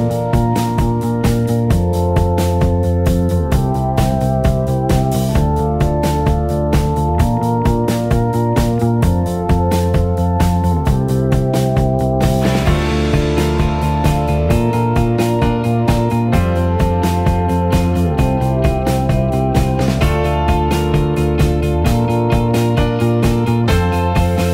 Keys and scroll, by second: 15.9 f.